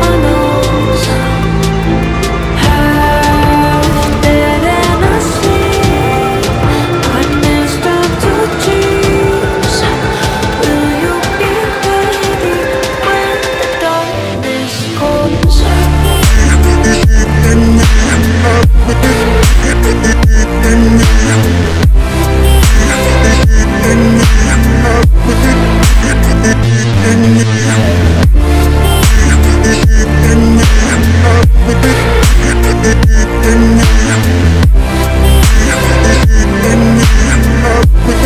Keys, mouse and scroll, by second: 1.2 ctrl+t, 1.5-5.5 drag, 6.5 click, 9.0 click, 9.8 b, 10.9 click, 11.9 b, 12.0-15.1 drag, 15.4 scroll up 1, 15.7 v, 16.2 alt+scroll down 1, 16.5 alt+scroll up 1, 17.4 alt+scroll up 1, 17.8 click, 18.2 scroll down 1, 19.5 click, 20.9 click, 22.8 click, 23.7 alt+scroll up 1, 24.2 b, 24.9 click, 28.8 v, 29.2 alt+scroll down 1, 29.8 alt+scroll up 1, 30.5 alt+scroll down 1, 31.0 b, 31.5 click, 33.1 scroll up 1, 34.0 scroll up 1, 34.9 click, 38.0 v.